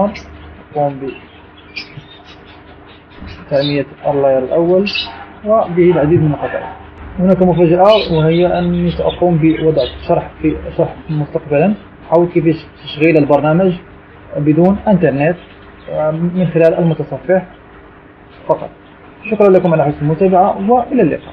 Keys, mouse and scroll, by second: 0.0 click, 1.1 click, 2.3 click, 6.5 click.